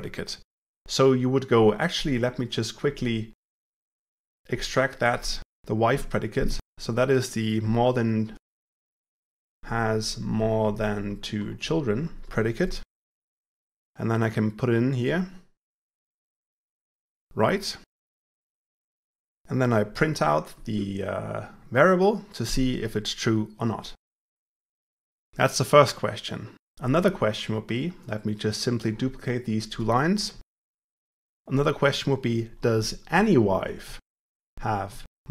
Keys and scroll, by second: 4.1 ctrl+alt+v, 8.9 shift+F6, 20.2 Tab, 30.8 shift+F6.